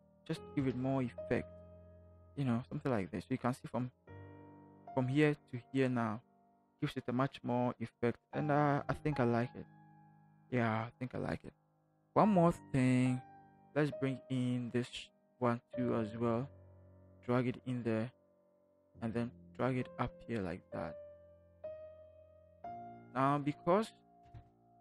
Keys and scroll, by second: 0.6 v, 4.4 ctrl+h, 24.3 Return.